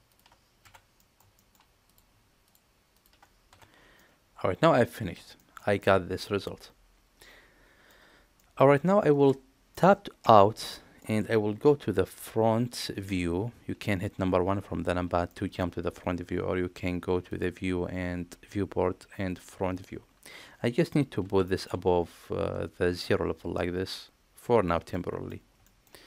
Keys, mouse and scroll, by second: 0.1 shift+click, 0.6 f, 1.0 middle click, 1.4 shift+middle click, 1.9 click, 2.9 shift+click, 3.5 f, 4.0 middle click, 5.4 shift+middle click, 5.8-7.9 middle drag, 8.4 middle click, 9.7 middle click, 10.2 Tab, 10.7-11.0 middle drag, 12.2 KP_1, 15.4 shift+middle click, 17.4-19.8 drag, 21.2 g, 24.9-25.3 middle drag, 25.7 shift+middle drag.